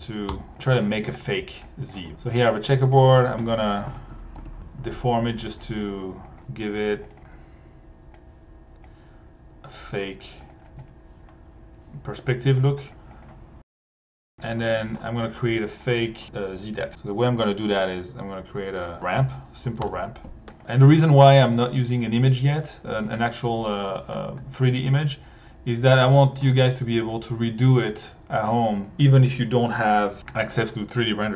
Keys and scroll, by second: 0.3 Return, 0.6 1, 1.3 alt+1, 3.9 Tab, 4.1 c, 4.4 r, 4.5 Return, 10.8 1, 18.7-19.6 typing, 19.8 Return, 23.9 1.